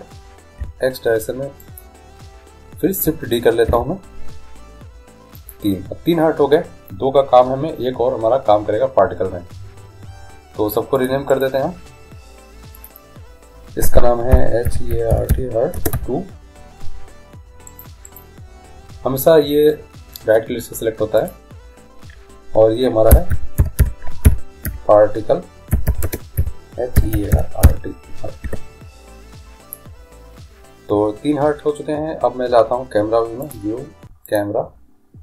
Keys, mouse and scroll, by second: 3.9 shift+d, 11.2-14.9 drag, 11.5-13.3 right drag, 18.2-20.1 right drag, 21.4-23.1 drag, 34.5 click.